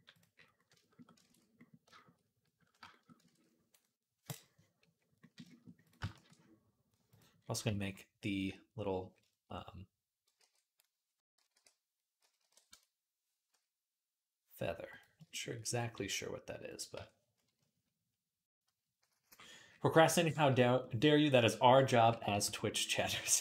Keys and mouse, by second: 1.1 ctrl+s, 1.8 shift+middle click, 1.9 shift+click, 3.1 ctrl+s, 5.2 shift+middle click, 5.7 click, 5.8-21.4 shift+middle drag, 5.9 shift+a, 10.2 alt+g, 11.0 Tab, 11.3 r, 13.3 s, 15.8 s, 16.8 Tab, 18.3 KP_Decimal, 21.8 KP_1, 22.1 Tab, 22.9 g.